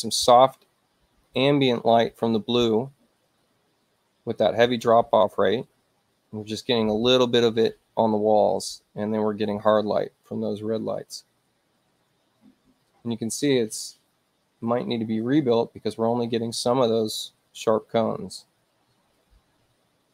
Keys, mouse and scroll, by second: 19.2 F5.